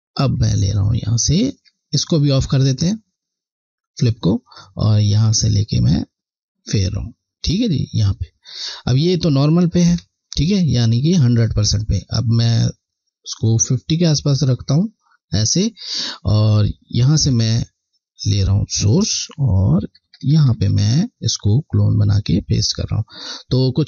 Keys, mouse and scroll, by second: 0.4 click, 2.3 click, 4.3 click, 16.6 click, 17.1 alt+click, 21.8 click, 22.3 click.